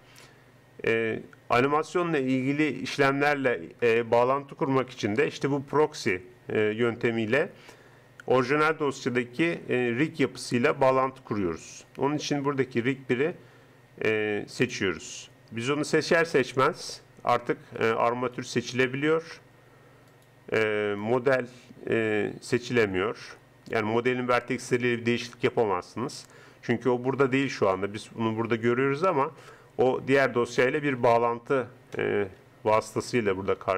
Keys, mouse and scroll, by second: 16.3-17.8 middle drag, 17.8-20.1 right drag, 20.1-22.4 drag, 22.4 Tab, 22.8 Tab, 27.8 middle click, 28.4 click, 29.4-30.6 middle drag.